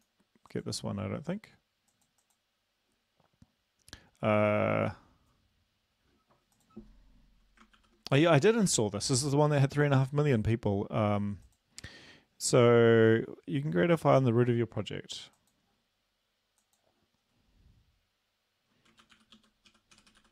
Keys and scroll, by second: 7.8 ctrl+p, 8.8 Escape, 19.0-20.2 typing.